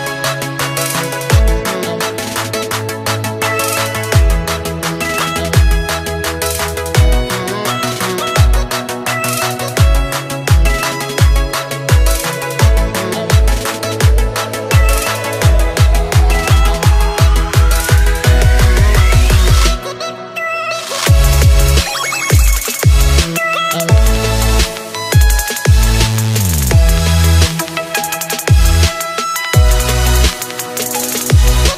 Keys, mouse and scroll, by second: 0.6 click, 1.1-1.5 scroll down 3, 1.5-5.1 middle drag, 6.6 KP_7, 7.9 b, 10.9-11.5 scroll up 1, 11.5-12.1 scroll up 4, 12.1 shift+click, 14.2 ctrl+j, 14.7 click, 15.2 scroll down 3, 15.5-19.1 middle drag, 20.8 click, 21.6 click, 22.4 KP_7, 23.1-23.8 scroll down 1, 23.8-24.7 scroll up 5, 24.7 click, 25.3-25.6 scroll down 1, 25.6-26.1 shift+middle drag, 26.1-26.6 scroll up 3, 28.6 s.